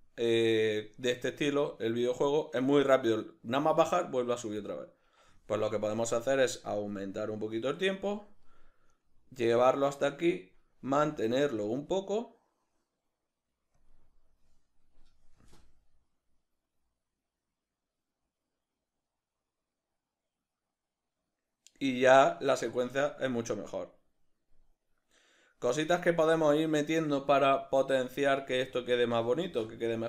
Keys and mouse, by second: 5.0 Escape, 8.9 right click, 11.1 shift+d, 13.9 click, 15.5 space, 28.1 Escape, 29.4 space.